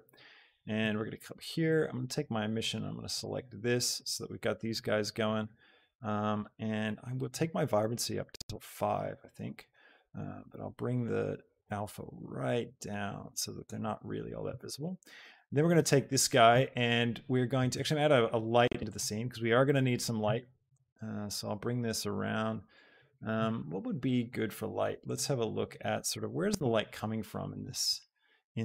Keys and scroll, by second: 8.4 Return, 20.1 r.